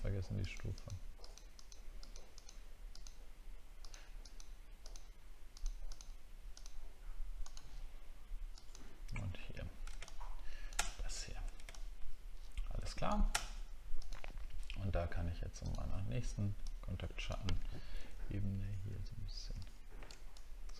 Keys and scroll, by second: 9.3 alt+scroll down 1, 11.0 alt+scroll down 3, 18.0 ctrl+z, 19.5 ctrl+z.